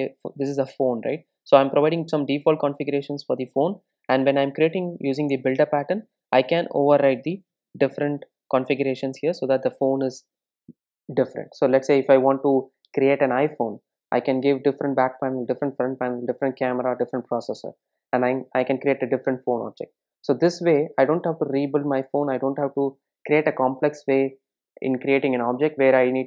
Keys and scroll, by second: 4.1 super+e, 7.5 super+z, 8.6 super+z.